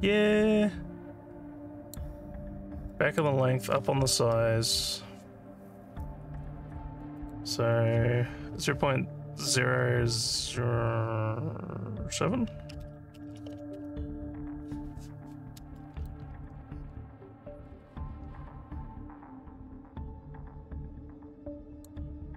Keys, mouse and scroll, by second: 2.9 alt+middle click, 7.2 click, 16.1-21.9 alt+drag.